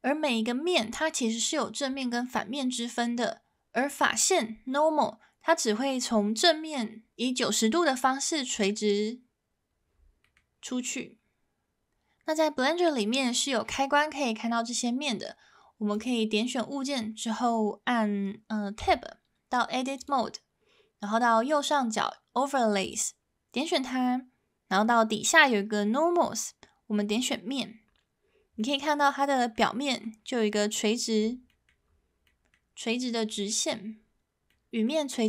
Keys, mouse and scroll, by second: 10.2 middle click, 18.8 Tab, 20.0 click, 22.8-28.4 drag, 28.6 middle click, 29.3 middle click, 29.8 middle click, 31.5 middle click, 32.2 middle click, 33.5 middle click, 34.5 middle click.